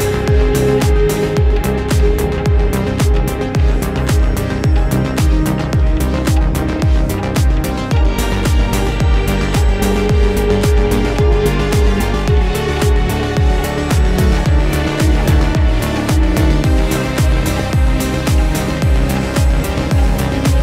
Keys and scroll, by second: 5.0 Delete, 5.4 Return, 5.8 Delete, 6.4 shift+Delete, 6.8 shift+super+Return, 7.8 shift+Return.